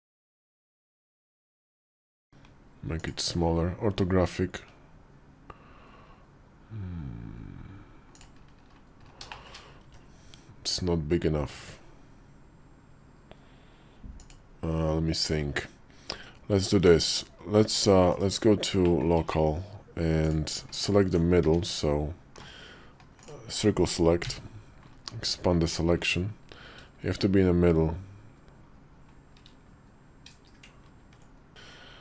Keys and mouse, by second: 2.1 Tab, 2.3 s, 3.3 KP_5, 4.4 s, 9.2 shift+click, 9.7 s, 16.1 Tab, 17.5 Tab, 17.9 /, 18.7 middle click, 19.0 Tab, 20.6 alt+click, 21.2 `, 24.1 c, 31.5 KP_5, 31.5 s.